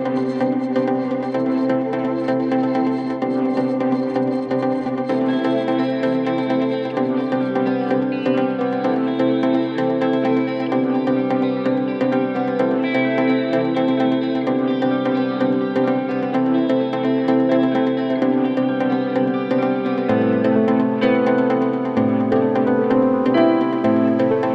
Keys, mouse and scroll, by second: 7.9 v, 10.9 ctrl+t, 23.6 Return.